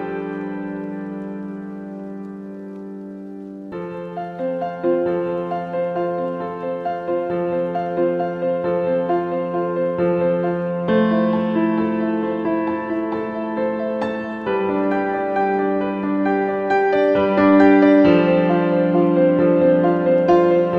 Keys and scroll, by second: 8.4 super+c, 8.8 super+f, 9.9 super+z.